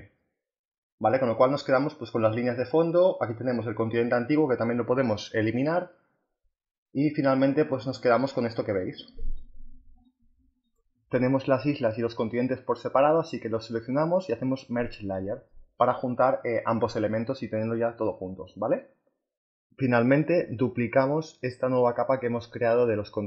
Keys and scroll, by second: 4.9 Delete.